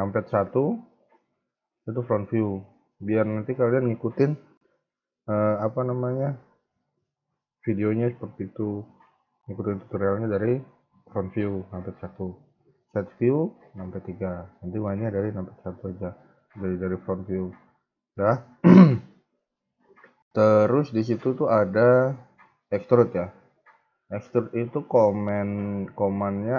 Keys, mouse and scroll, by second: 0.3 KP_1, 1.8-3.4 scroll up 1, 11.5 KP_1, 13.7 KP_3, 15.1 KP_1, 15.9 scroll down 2, 16.3 shift+middle click, 16.7 scroll up 2, 18.3 Tab, 19.2 scroll down 1, 22.6 click, 23.3 a, 23.4 a, 24.2 b, 25.0 shift+middle click, 25.8-26.4 scroll up 2.